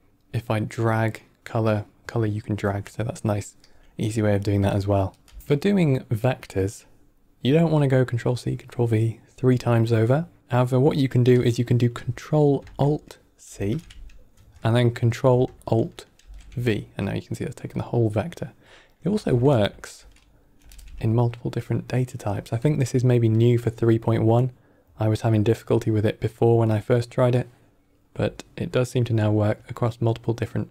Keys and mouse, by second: 0.4-1.7 drag, 4.5 drag, 5.2 x, 5.4 ctrl+middle click, 13.3 ctrl+alt+c, 16.1 ctrl+alt+v, 19.5 ctrl+alt+c, 20.5 ctrl+alt+v, 22.5-23.3 drag.